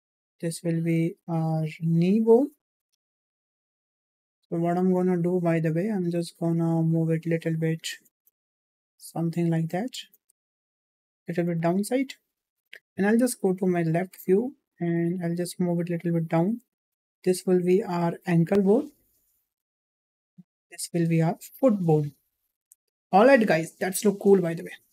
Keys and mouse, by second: 4.0 shift+middle click, 5.7 click, 6.0 click, 6.9 click, 9.0 click, 10.0 shift+middle click, 10.9 click, 12.2 click, 12.9 `, 15.3-16.5 drag, 16.9 e, 20.4 e, 23.6 middle click.